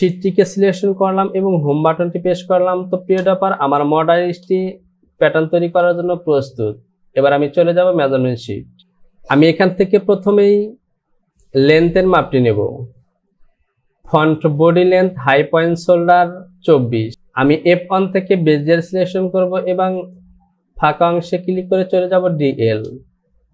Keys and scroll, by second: 1.8 Home.